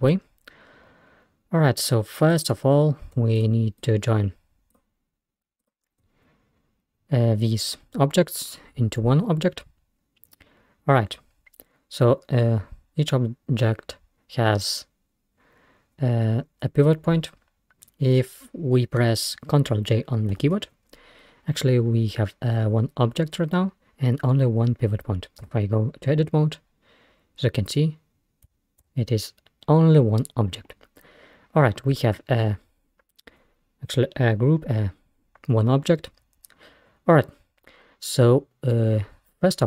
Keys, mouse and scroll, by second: 2.3 click, 3.4 shift+click, 3.8 shift+click, 4.7 shift+click, 5.6 shift+click, 20.4 ctrl+j, 25.5 Tab, 28.9 Tab.